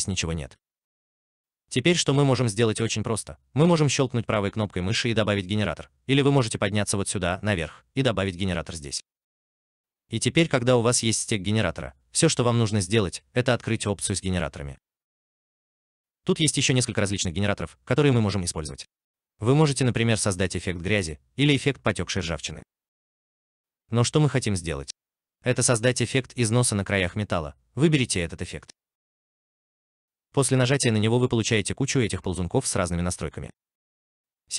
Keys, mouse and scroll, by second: 2.9 right click, 24.9-25.5 scroll down 1, 25.5-27.6 scroll up 1, 30.8-33.0 scroll down 1, 33.8-34.5 scroll up 1.